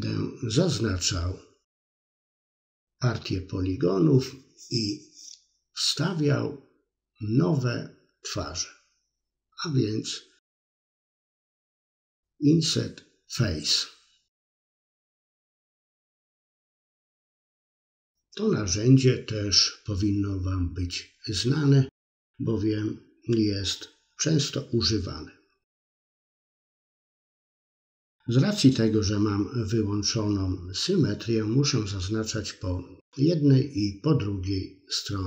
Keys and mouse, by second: 0.0 c, 0.9 middle click, 2.3 i, 2.8 click, 4.0-5.0 middle drag, 5.7 click, 6.5 middle click, 7.6 middle click, 8.1 middle click, 8.4 click, 9.0 shift+click, 9.3 c, 10.2 middle click, 10.6 c, 11.3 right click, 11.8 i, 12.5 click, 13.6 right click, 14.1 click, 14.9 middle click, 15.8 middle click, 16.9 middle click, 17.4 middle click, 18.0 middle click, 18.5 middle click, 18.8 KP_3, 19.1 click, 19.6 c, 23.1 middle click, 23.4 middle click, 24.0 c, 26.1-27.3 middle drag, 27.4 middle click, 28.4 i, 28.9-30.2 drag, 30.4 middle click, 31.2 click, 31.7 middle click, 32.0 middle click, 33.1 s, 34.3 middle click, 34.9 click, 35.0 middle click.